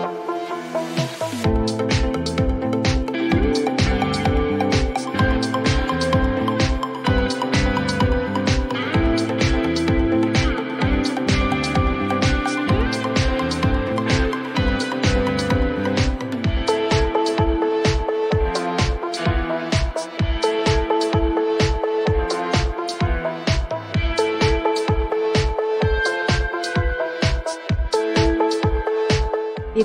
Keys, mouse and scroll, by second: 5.5 click, 12.1 click.